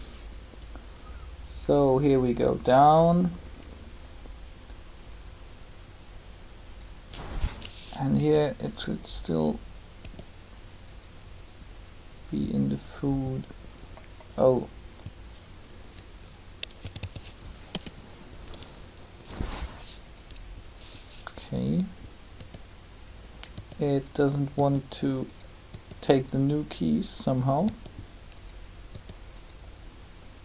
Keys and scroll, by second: 8.1 r, 16.7 a, 16.9 a, 17.7 i, 22.3 r.